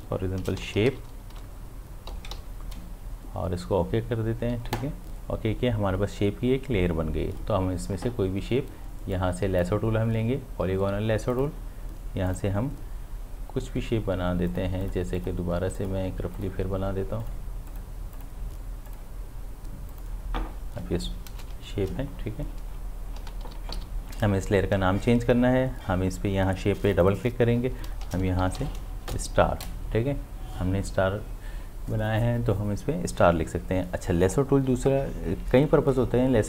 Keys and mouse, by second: 0.4-2.6 typing, 4.7 click, 9.1-11.3 drag, 14.5 click, 23.2 ctrl+d, 23.8 v, 26.9 click, 28.1-28.6 typing, 29.1 Return.